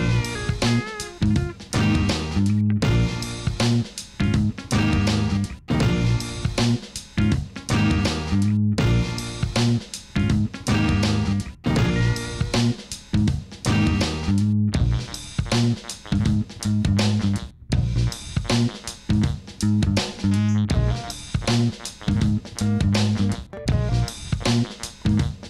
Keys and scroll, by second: 2.1 alt+h, 3.5 x, 4.6 Tab, 10.1 Tab, 11.1 Tab, 12.9 u, 13.7 u, 15.2 u, 16.4 u, 19.5 u, 22.6 Tab.